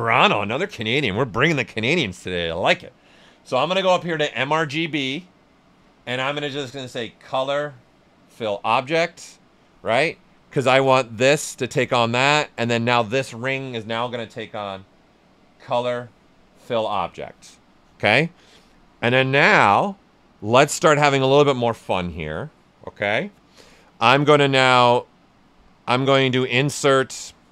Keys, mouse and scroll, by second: 3.7 click, 7.2 click, 10.4 right click, 11.7 click, 15.5 click, 17.7-20.3 right drag, 24.3-26.3 drag.